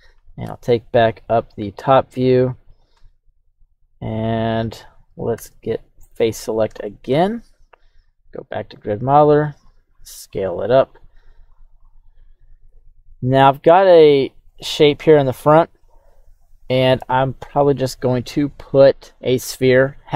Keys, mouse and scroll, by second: 0.4 KP_3, 1.1-2.9 right drag, 2.9 Tab, 3.7 right click, 4.3 right click, 4.5 Tab, 5.3 Tab, 6.0 right click, 6.8 shift+middle click, 7.9 q.